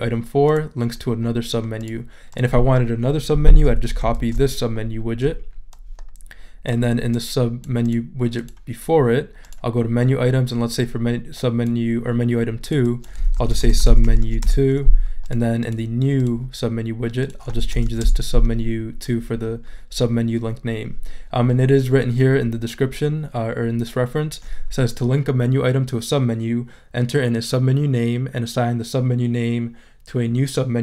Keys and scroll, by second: 3.9 super+c, 4.1 super+v, 13.1-14.7 typing, 17.7 BackSpace, 17.8 2, 18.0 Return.